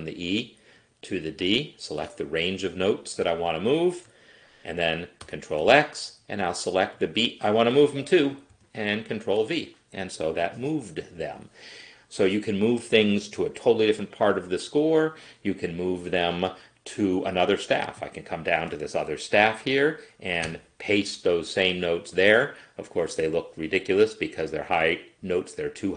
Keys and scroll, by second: 5.4 ctrl+x, 8.5 ctrl+v, 20.5 ctrl+v.